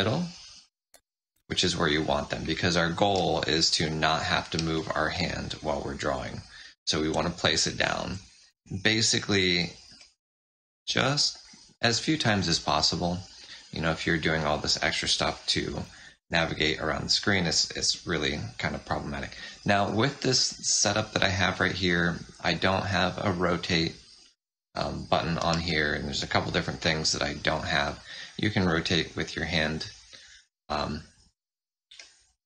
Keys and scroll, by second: 1.2 F7, 3.8 z, 5.0 space, 8.0 space, 8.4 z, 9.8 space, 14.0 F7.